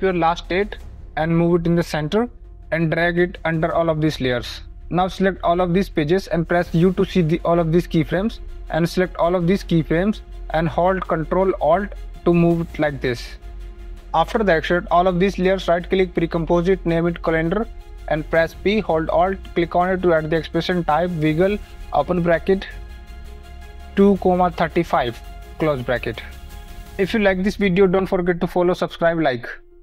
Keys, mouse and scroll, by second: 0.0-0.9 typing, 1.3 click, 1.8 click, 3.0 click, 3.9 click, 5.7 click, 6.3 shift+click, 7.0 u, 8.3 click, 8.9 click, 9.5 click, 12.0 ctrl+alt+click, 12.5 ctrl+alt+click, 14.0 click, 15.1 right click, 15.9 click, 16.3-18.6 typing, 19.7 click, 19.9-21.1 typing, 21.5 Return, 23.0 click, 23.2 KP_2, 23.7 ., 24.0 KP_3, 24.3 KP_5, 25.7 click, 27.0 ,, 28.2 click, 29.7 click.